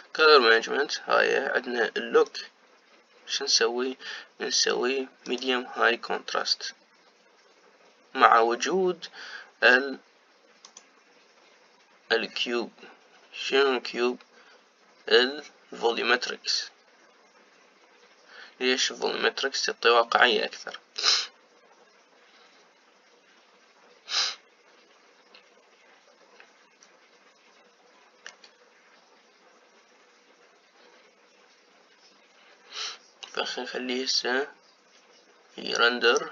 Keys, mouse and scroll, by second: 3.3-12.0 drag.